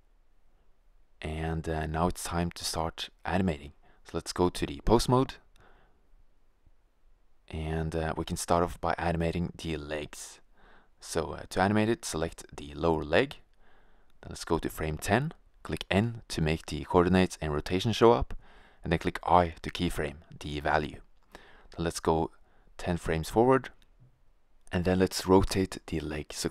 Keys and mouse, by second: 9.0-10.6 middle drag, 10.9-12.1 middle drag, 12.1-13.8 right drag, 13.8 click, 16.1 n, 18.4 i, 23.9-25.7 drag, 25.7 middle click.